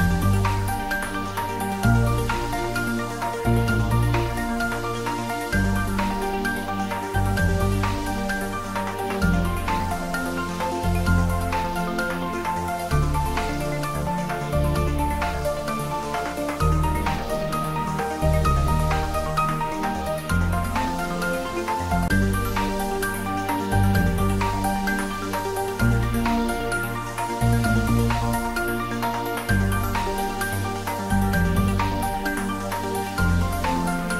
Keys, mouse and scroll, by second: 3.6-4.1 scroll down 1, 4.4-5.2 scroll down 1, 5.9 scroll up 1, 8.0-9.0 middle drag, 10.6-12.5 scroll down 1, 17.6 scroll up 1, 20.2 Tab, 20.7-21.1 scroll up 1, 21.8 ctrl+r, 22.2 click, 24.2 z, 25.2 ctrl+r, 26.2 click, 29.0 click, 30.5 3, 31.4 alt+shift+click, 32.5 click, 33.6 shift+click.